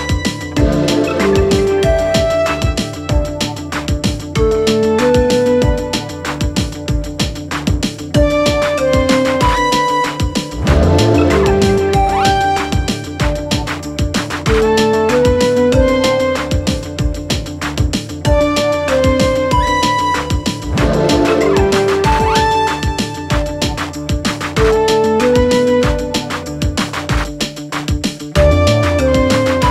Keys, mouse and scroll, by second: 1.9 click, 3.2-4.7 typing, 5.5 ctrl+a, 6.3 click, 6.9-7.4 typing, 8.5 click, 10.4-22.5 alt+shift+drag, 22.5 click.